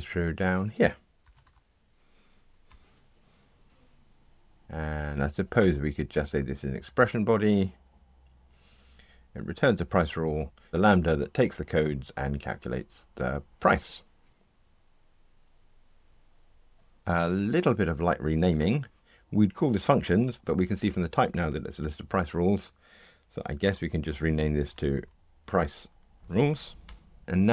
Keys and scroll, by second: 2.7 Return, 4.6 Escape, 5.6 alt+Return, 14.3 ctrl+r, 23.6 shift+F6.